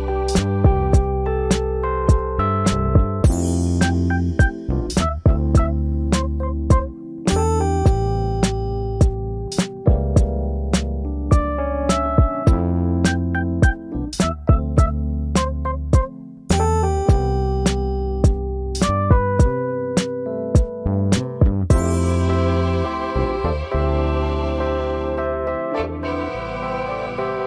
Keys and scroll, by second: 1.9 f, 2.9 space, 4.4 p, 8.4 shift+space, 9.5 Escape, 9.7 Escape.